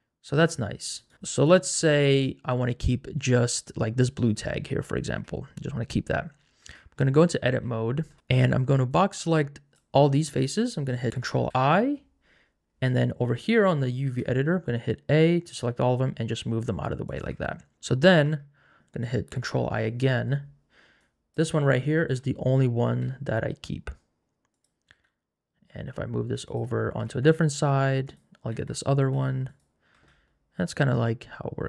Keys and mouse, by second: 1.1 Tab, 1.3 click, 6.7 Tab, 8.9 click, 11.5 ctrl+i, 14.2 a, 15.6 g, 17.5 Tab, 18.3 Tab, 19.4 ctrl+i, 21.9 shift+middle click, 22.8 g, 24.5 click, 24.9 g, 27.3 g, 28.5 s, 29.2 g, 30.0 Tab.